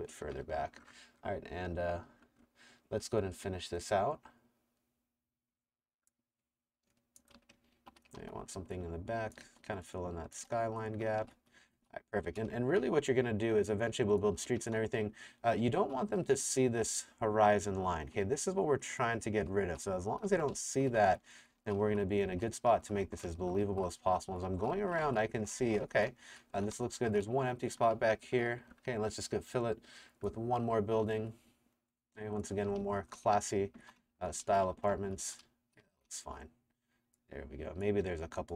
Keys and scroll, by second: 0.3 Escape, 7.1-8.2 typing, 9.4 t, 10.5-13.0 typing, 14.5 Escape, 14.8 w, 15.7 a, 17.2-28.0 typing, 32.4-36.4 typing.